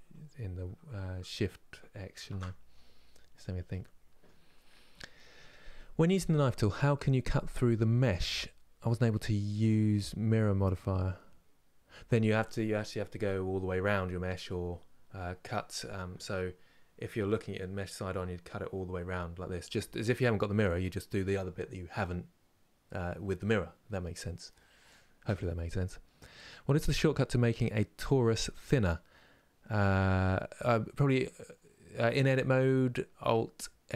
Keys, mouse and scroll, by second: 3.4-33.9 middle drag.